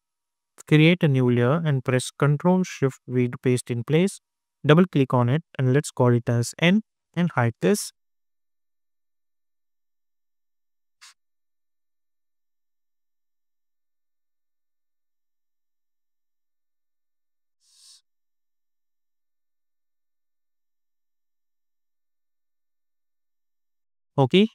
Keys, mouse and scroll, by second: 0.7 click, 3.1 ctrl+shift+v, 4.9 click, 6.3 n, 7.0 Return, 9.1 click, 16.7 click, 22.7-24.5 drag.